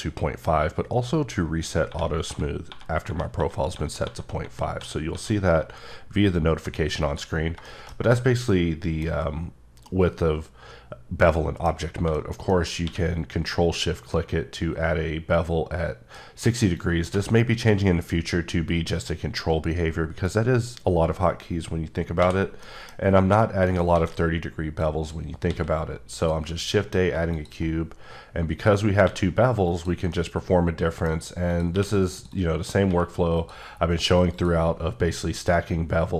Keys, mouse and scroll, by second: 1.9-6.6 typing, 7.0 click, 7.6 shift+middle click, 8.0-8.5 scroll down 1, 8.5 middle click, 9.1 scroll up 2, 9.8 middle click, 11.7-12.1 scroll down 2, 12.1 shift+middle click, 12.8 q, 16.7 shift+click, 22.2 x, 22.6 middle click, 23.0 scroll up 1, 23.7 right click, 23.9 a, 24.8 click, 25.4 s, 26.1 click, 26.5 middle click, 27.3 click, 29.0 click, 30.1 middle click, 31.1 scroll up 2, 31.5 click, 31.7 q, 32.2 click, 32.3 double click, 32.8 q, 33.3 click, 34.3 click.